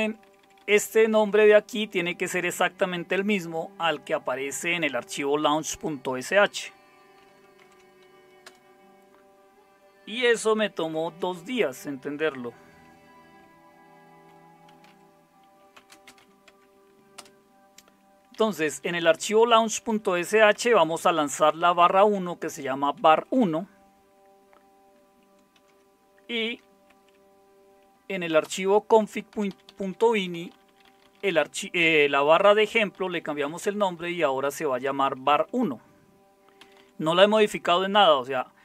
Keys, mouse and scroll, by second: 0.0-0.7 typing, 1.1 Left, 1.3 Right, 1.6 Right, 1.9 Right, 6.1 Right, 7.6 ctrl+o, 8.4 Return, 10.9 ctrl+x, 14.5-16.7 typing, 17.1 Return, 18.3 Down, 18.6 Down, 18.7 Down, 18.9 Down, 19.0 Down, 19.9 Down, 20.5 Up, 20.8-21.7 typing, 21.8 Right, 23.1-25.5 Right, 26.5 ctrl+x, 26.9 Up, 28.4 Up, 29.3 Return, 29.5 Down, 29.7 Down, 29.8 Down, 30.0 Down, 30.2-35.0 Down, 35.2 Up, 35.5 Up, 36.6 Up, 36.8 Down.